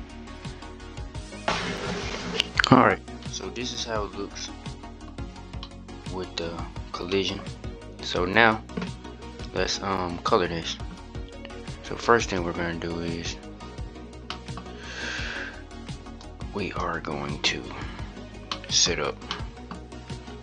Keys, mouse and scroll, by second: 4.8-6.6 middle drag, 6.6 scroll up 2, 6.9-7.8 scroll down 1, 7.8-9.2 scroll down 1, 9.2-9.7 scroll down 2, 9.7-12.2 scroll up 3, 12.2-12.8 drag, 13.6-14.0 scroll down 1, 14.0 middle click, 14.3-15.3 scroll up 1, 15.3-15.9 scroll up 3, 15.9-18.3 drag, 18.3-18.7 shift+middle drag, 18.7-19.0 scroll up 1, 19.0-20.0 middle drag.